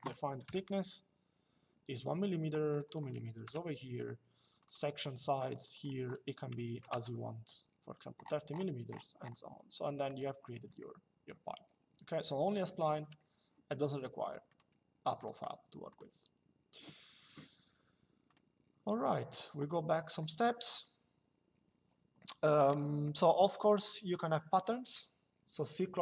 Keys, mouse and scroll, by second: 0.2 KP_1, 2.4 click, 3.2 KP_2, 4.3 click, 9.8 click, 14.2 click, 18.0 click, 19.9 click.